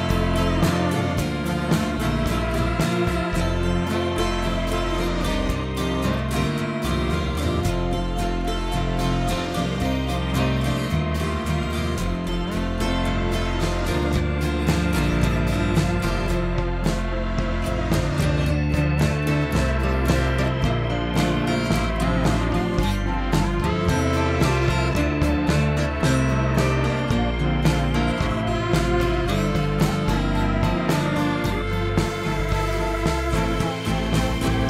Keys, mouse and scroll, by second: 2.1 Tab, 2.6 shift+d, 4.0-5.3 right drag, 5.3 r, 7.0 s, 9.4 g, 10.4 drag, 10.7 middle click, 11.6 KP_3, 12.5-13.1 shift+middle drag, 13.1 click, 13.4-14.3 middle drag, 14.3 ctrl+KP_3, 14.9 scroll up 2, 15.2 drag, 15.7 s, 16.5 scroll down 1, 16.7-17.2 shift+middle drag, 17.2 click, 18.2 click, 18.7 shift+d, 19.5 s, 20.7 ., 21.9-23.0 right drag, 23.0 s, 24.0 s, 24.9 g, 27.1 s, 28.0 scroll up 2, 28.2-28.6 shift+middle drag, 28.6-28.9 scroll up 1, 28.9 drag, 29.3 click, 30.7 g, 32.0 shift+d, 33.9 shift+click.